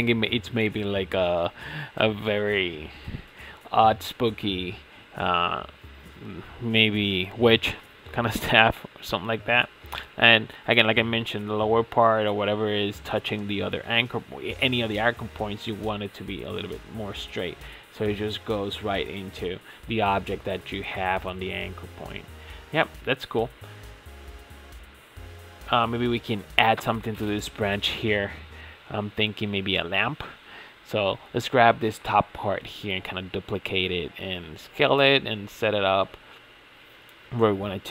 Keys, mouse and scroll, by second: 0.2-1.2 shift+middle drag, 1.2-1.6 scroll up 3, 1.6 shift+middle click, 2.3 click, 2.6 ctrl+a, 4.0 click, 4.3 ctrl+a, 6.2 scroll down 1, 6.5-7.7 shift+middle drag, 7.7-8.1 scroll up 3, 8.1 shift+middle click, 9.0 click, 9.8 g, 12.3 scroll up 1, 12.4-13.0 shift+middle drag, 13.0 click, 13.3 scroll down 2, 13.6-14.4 shift+middle drag, 14.4 g, 16.2 ctrl+a, 17.6-18.0 scroll down 4, 18.0-19.5 shift+middle drag, 19.5 ctrl+s, 20.3 Tab, 20.6-23.8 middle drag, 23.8 scroll up 5, 24.0 Tab, 24.4-26.5 shift+middle drag, 26.5 click, 27.9-28.4 middle drag, 28.4 Tab, 29.0-29.6 scroll down 5, 29.6 click, 30.1-31.4 middle drag, 31.4 KP_1, 32.4 shift+d, 32.9 click, 33.4 shift+s, 35.2 g, 36.1-36.4 scroll up 9, 36.4 shift+middle click, 37.3 Tab, 37.5-37.9 scroll down 4.